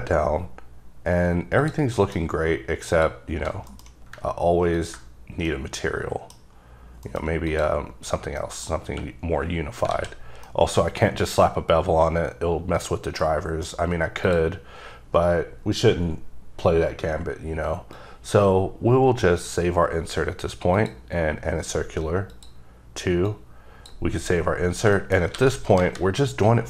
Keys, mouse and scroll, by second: 1.8 click, 2.1 middle click, 2.4-2.9 scroll up 3, 3.1 shift+click, 3.7 click, 3.8 alt+m, 4.9 ctrl+click, 5.6 middle click, 6.5 scroll up 2, 7.2 m, 7.6 click, 8.2-8.5 scroll down 2, 8.5 middle click, 9.0 q, 10.1 alt+a, 10.3-10.6 scroll down 1, 10.6 middle click, 13.4 middle click, 13.6 middle click, 14.0 scroll up 3, 14.4 click, 14.8-15.6 scroll up 1, 15.6-17.7 scroll down 2, 18.1 click, 20.9 click, 23.0 click, 23.4 click, 24.7-25.3 scroll down 4, 25.1 shift+middle click, 25.3 shift+scroll up 2, 25.5 alt+a, 26.0 KP_0.